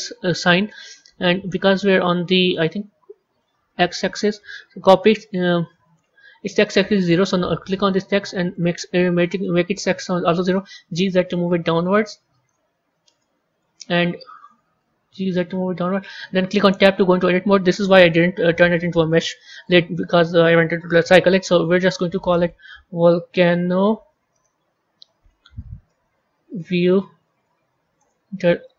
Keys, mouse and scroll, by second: 1.4-2.7 middle drag, 2.7-4.0 scroll down 1, 4.0 click, 6.9 click, 8.4-10.5 drag, 10.5 g, 12.6-13.1 scroll up 2, 13.1-14.7 middle drag, 14.7 g, 16.7 Tab, 19.2-26.9 typing, 27.9 Return, 28.6-28.7 typing.